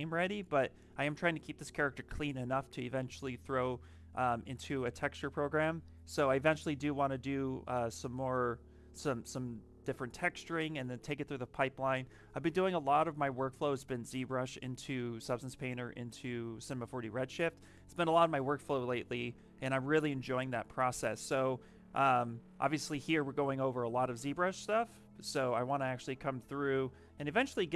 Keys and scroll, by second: 26.3 s.